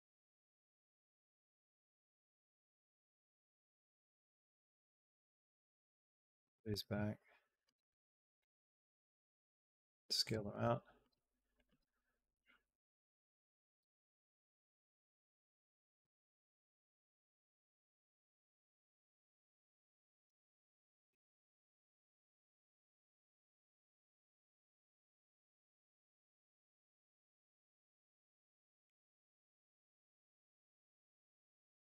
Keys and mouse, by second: 4.4 click, 4.6 b, 5.2 g, 6.5 click, 6.6 space, 7.5 space, 7.6 click, 8.2 click, 8.7-11.5 typing, 11.4 click, 13.6 space, 13.8 click, 14.0 space, 15.8 space, 16.1 click, 16.9 click, 17.2 space, 20.0 space, 20.6 click, 21.3 b, 21.9 g, 22.9 click, 23.0 space, 25.5 click, 28.2 space, 28.3 click, 28.7 click, 28.8 space.